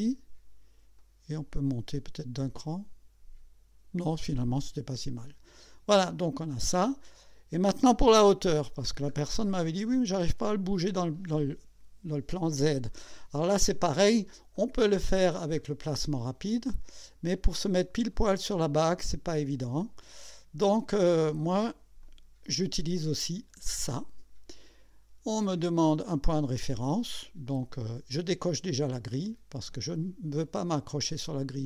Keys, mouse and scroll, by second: 1.0 click, 5.2 click, 6.0-7.0 drag, 7.1-7.5 scroll down 2, 8.3 KP_1, 9.1 scroll up 2, 9.9 right click, 11.2 scroll up 1, 14.6 click, 15.4 scroll down 1, 16.4-21.4 drag, 22.0 click, 23.8 click, 29.7 click.